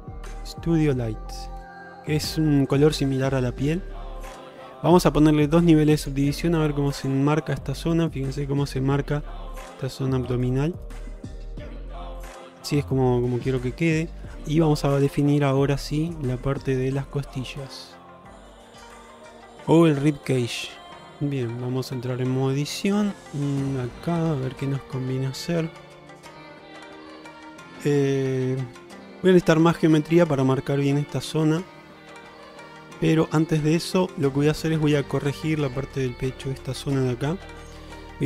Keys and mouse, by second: 3.5 shift+middle drag, 6.0 click, 7.7-8.5 middle drag, 9.6-10.5 middle drag, 12.5 shift+middle drag, 13.0-14.4 middle drag, 16.9 click, 18.5-20.7 drag, 21.1 middle click, 21.7 Tab, 22.4-23.0 middle drag, 23.3 middle drag, 23.8-27.2 middle drag, 27.6 shift+middle click, 28.0-29.1 middle drag, 30.8-32.4 middle drag, 32.7 shift+middle click, 33.3 middle click, 33.8 shift+middle click, 34.4 middle click, 35.6 shift+middle click.